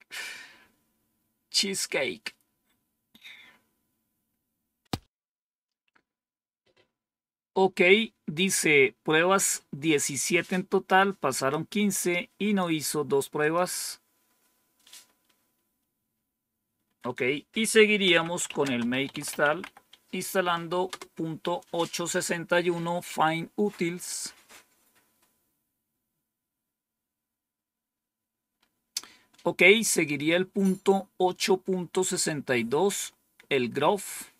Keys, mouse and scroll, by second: 0.2 scroll down 1, 9.4 click, 10.8 click, 11.9 click, 13.3 click, 14.7 Home, 16.7 End, 17.7-20.8 typing, 26.1-26.9 scroll down 2, 26.9-27.8 scroll down 1, 29.9 click, 34.2 click.